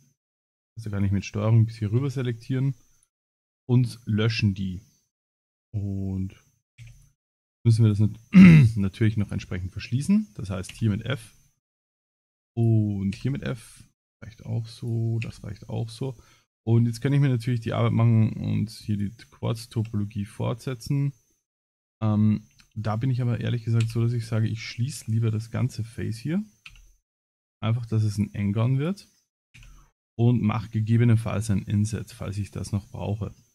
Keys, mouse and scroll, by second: 0.3 ctrl+click, 0.6 middle click, 1.1 ctrl+click, 2.0 x, 3.4 middle click, 6.8 2, 6.9 click, 7.5 click, 8.3 middle click, 9.2 shift+click, 9.3 shift+click, 10.7 f, 11.2 middle click, 12.0 scroll up 3, 12.5 click, 13.2 f, 13.5 middle click, 14.0 shift+middle click, 14.8 click, 15.3 f, 16.9 alt+click, 19.4 f, 19.8 f, 21.0 middle click, 21.7 middle click, 22.4 ctrl+z, 22.6 ctrl+z, 23.0 middle click, 23.8 f, 24.8 ctrl+z, 25.8 alt+click, 26.7 f, 27.1 middle click, 28.1 alt+click, 28.7 alt+click, 29.6 f, 30.0 middle click, 30.4 a, 30.8 middle click, 32.2 ctrl+s, 32.4 middle click, 33.4 middle click.